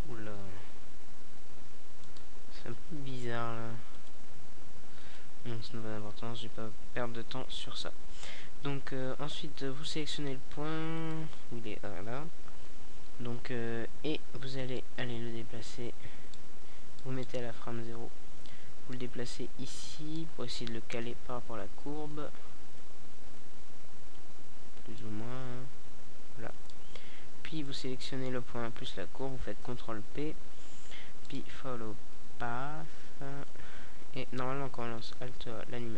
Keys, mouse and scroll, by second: 1.7-3.6 middle drag, 4.6-7.1 drag, 7.3-9.6 middle drag, 9.6-10.9 drag, 11.8-13.6 drag, 13.8-15.2 middle drag, 15.8 KP_Decimal, 16.8-17.6 middle drag, 19.7-21.3 middle drag, 22.2 right click, 24.1 ctrl+p, 29.6 alt+a, 31.0 KP_0, 34.6 a.